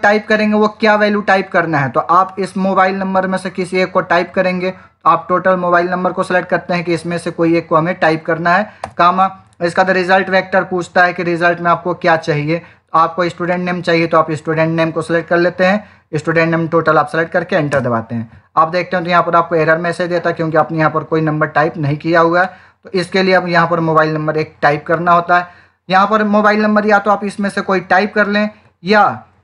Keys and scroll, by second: 17.6 Return.